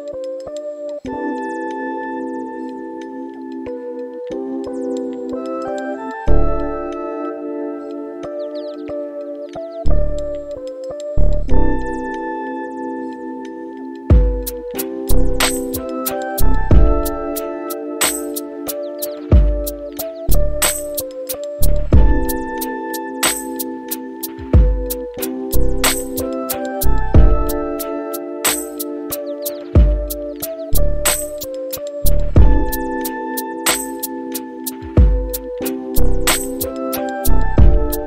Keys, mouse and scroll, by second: 1.9 click, 4.9 click, 6.6 click, 9.1 click, 12.3 click, 14.4-18.1 drag, 19.0-20.1 right drag, 23.2-31.0 drag, 31.4-32.9 scroll up 8, 33.5-38.0 drag.